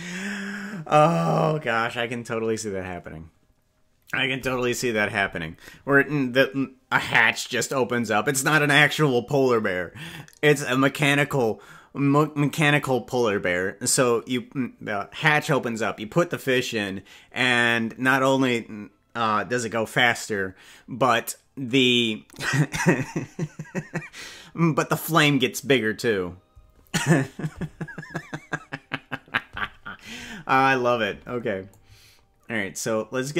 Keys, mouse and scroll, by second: 31.7-33.3 drag.